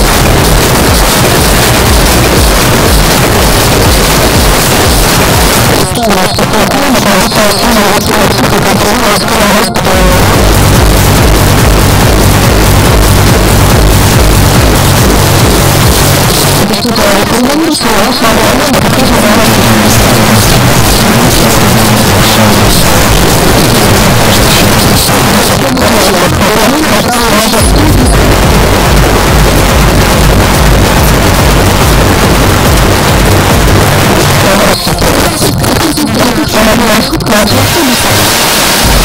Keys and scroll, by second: 5.5 Page_Down, 16.2 Page_Down, 25.0 Page_Down, 33.8 Page_Down.